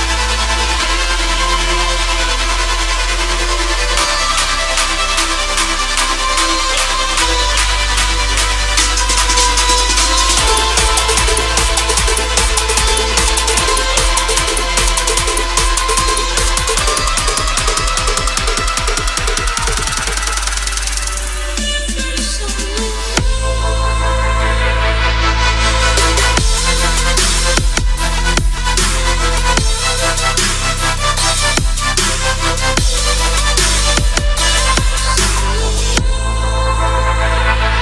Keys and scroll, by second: 1.5 Return, 15.1 Return, 25.4 ctrl+e, 32.4 BackSpace, 32.9 1, 33.5 Return, 35.1 ctrl+s, 35.8 Return, 37.6 ctrl+s.